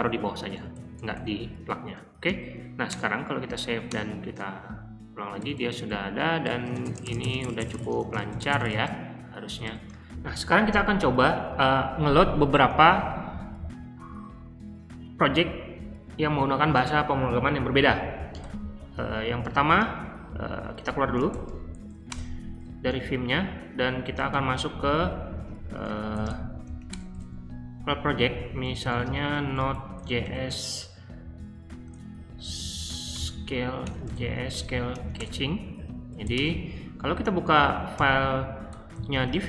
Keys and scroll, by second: 0.0 Escape, 0.1-1.1 typing, 2.1-7.7 typing, 12.9 super+Tab, 18.4 ;, 18.9 Escape, 20.0-26.9 typing, 28.4-30.4 typing, 33.1-36.7 typing, 37.9-39.4 typing.